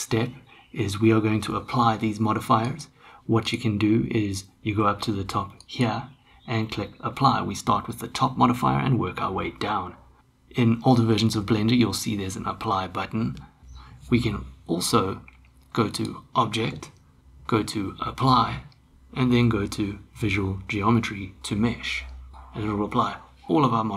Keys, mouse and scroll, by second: 2.6 click, 5.6-11.8 drag, 16.1-22.3 drag.